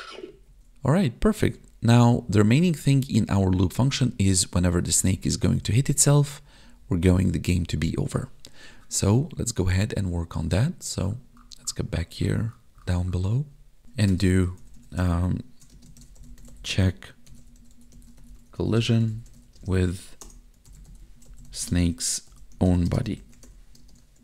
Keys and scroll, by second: 0.2 Up, 0.3 Down, 0.6 Up, 0.7 Left, 1.3 Right, 1.4 Up, 1.9 Right, 2.2 Down, 2.5 Left, 3.0 Up, 3.5 Right, 3.8 Down, 3.9 Left, 4.3 Up, 4.5 Right, 4.8 Down, 4.9 Left, 5.2 Up, 5.4 Right, 5.6 Down, 5.7 Left, 6.0 Up, 6.2 Right, 6.6 Down, 6.8 Left, 7.2 Up, 7.4 Right, 7.6 Down, 7.8 Left, 15.7 space, 16.7 space, 18.8 space, 19.6 space, 21.7 space, 22.9 space, 23.8 space.